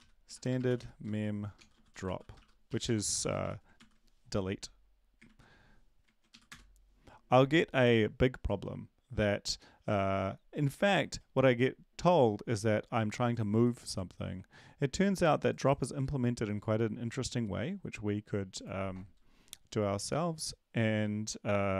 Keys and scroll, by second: 0.0-3.7 typing, 3.8 ctrl+s, 5.2 ctrl+`, 6.3 Up, 6.6 Return, 14.5 ctrl+`.